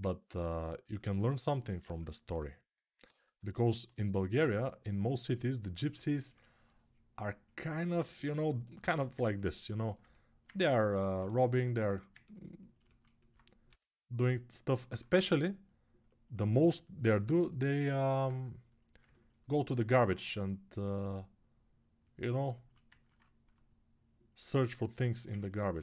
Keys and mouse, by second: 8.9-11.6 ctrl+drag, 11.6-16.2 alt+right drag, 13.4 g, 16.2-22.5 shift+drag, 22.5-25.8 ctrl+alt+right drag.